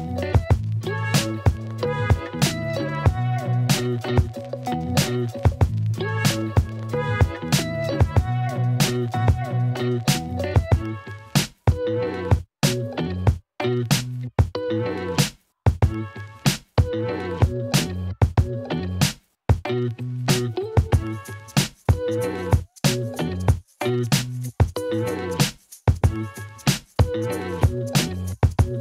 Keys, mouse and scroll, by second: 2.5 ctrl+b, 6.9 Tab, 7.4-8.5 drag, 8.5 alt+middle click, 8.8 ctrl+middle click, 9.0 middle click, 11.4-12.5 drag, 12.9 KP_1, 19.2 shift+a, 22.1 Tab, 22.6 r, 22.8 x, 23.2 9, 23.5 Return, 24.8 f, 26.0 y, 27.9 s.